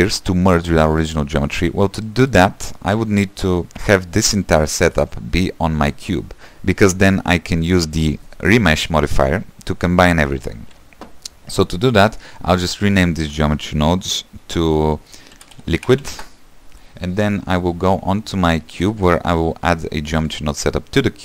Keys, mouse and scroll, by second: 0.2-2.1 shift+middle drag, 2.1 ctrl+s, 2.3 middle click, 2.7-5.3 scroll down 1, 5.3-6.3 scroll down 1, 19.0 click, 20.5-21.2 drag.